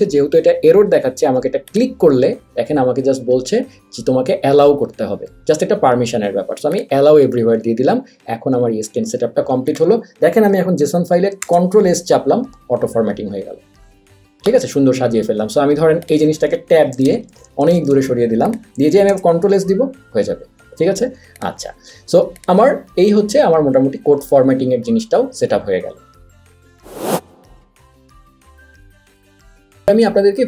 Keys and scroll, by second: 11.5 super+s, 17.0 Left, 17.2 Tab, 17.4 Tab, 17.5 Tab, 17.6 Tab, 17.8 Tab, 18.0 Tab, 19.2 super+s.